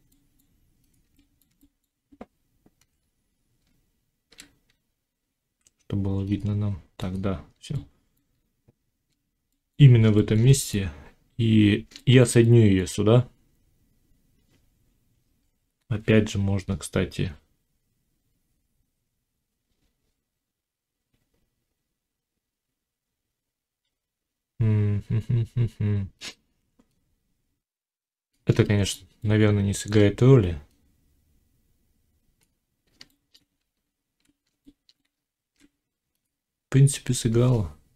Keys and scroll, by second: 2.7 1, 33.6 z, 34.9 Tab.